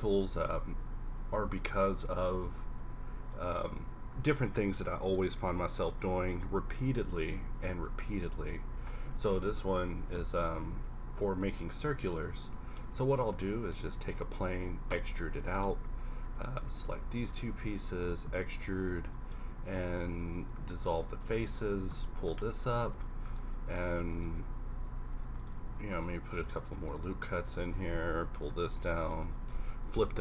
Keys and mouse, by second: 0.5 q, 6.0-7.7 typing, 9.3 KP_1, 9.7 KP_5, 9.9 r, 11.2 KP_1, 11.6 KP_5, 12.0 KP_Decimal, 12.3 Tab, 14.0 e, 15.1 ctrl+r, 15.6 ctrl+Tab, 16.7 z, 17.4 z, 17.7 e, 18.1 s, 19.8 x, 21.7 g, 22.9 ctrl+r, 25.0 ctrl+r, 25.6 ctrl+r, 27.7 g, 28.5 click, 28.6 a, 29.3 a, 29.9 ctrl+n.